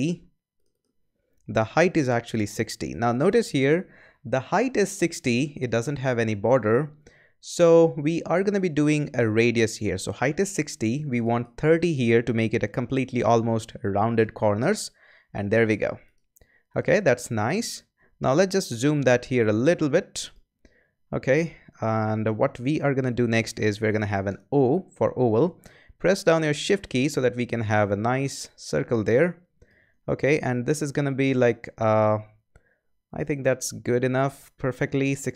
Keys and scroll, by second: 2.4-3.4 typing, 13.8-14.6 typing, 18.7 z, 24.2 o.